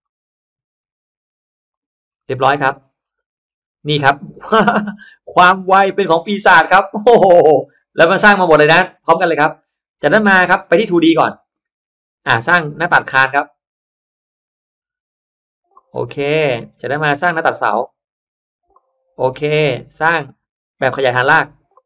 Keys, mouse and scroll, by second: 2.0 middle click, 2.3-2.6 scroll down 1, 2.8 scroll up 1, 3.4-3.7 scroll down 1, 4.8 click, 5.2 scroll up 1, 5.3 middle click, 5.7 scroll up 1, 6.0 middle click, 6.8-7.3 scroll down 1, 7.3 middle click, 7.9 scroll down 1, 8.4 middle click, 8.6 scroll down 1, 9.0 middle click, 10.8 click, 12.7 click, 16.1 click, 17.2 click, 19.0 click, 19.8 click.